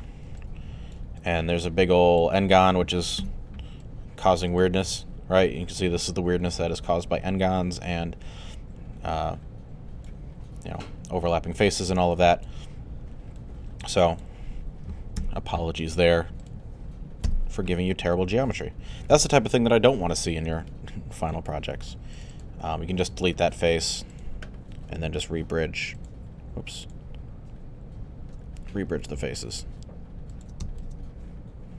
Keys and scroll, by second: 3.2 3, 15.2 i, 17.3 Delete.